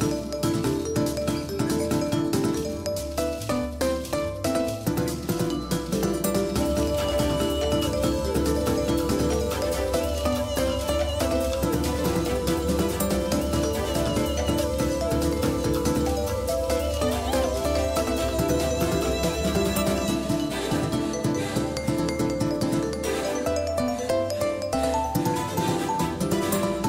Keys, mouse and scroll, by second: 2.6 shift+a, 12.8-14.1 middle drag, 14.1-16.3 drag, 16.3 Tab, 18.3 w, 19.9-22.0 middle drag, 24.2 Tab, 24.9 Tab, 26.7-26.8 drag.